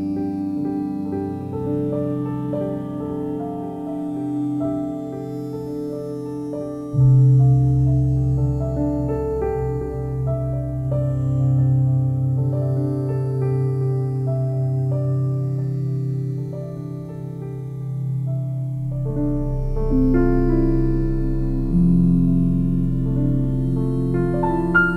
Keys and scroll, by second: 4.7 ctrl+z.